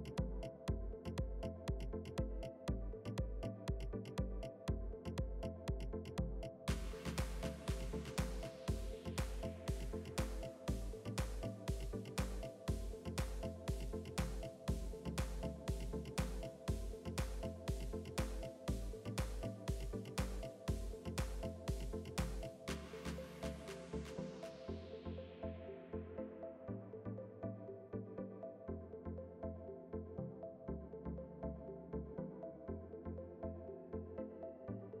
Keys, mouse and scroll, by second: 3.5-5.6 drag, 5.2 KP_1, 6.3 click, 8.1 e, 8.8 s, 10.7 middle click, 11.3 Tab, 11.6-16.5 drag, 12.7-13.7 middle drag, 13.9 Tab, 15.7-16.9 middle drag, 16.8-26.4 drag, 17.4-18.4 middle drag, 19.0-24.2 middle drag, 24.4 middle click, 26.4 s, 29.0 s, 31.2 Tab, 31.4-33.2 drag, 31.6-32.6 middle drag, 33.4-34.9 drag.